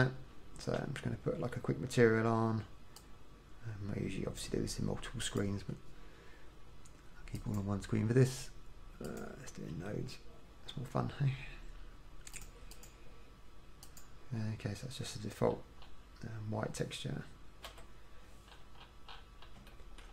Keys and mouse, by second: 3.1-7.4 drag, 7.6-10.8 drag, 12.5 click, 15.7-18.1 middle drag, 18.1 n.